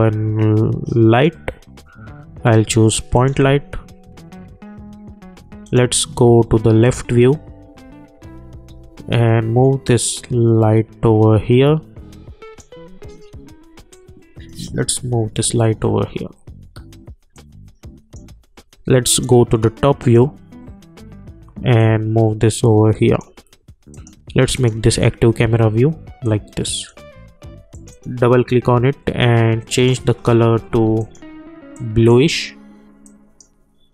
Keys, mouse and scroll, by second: 1.1 click, 5.6 click, 8.7 v, 10.2-33.9 drag.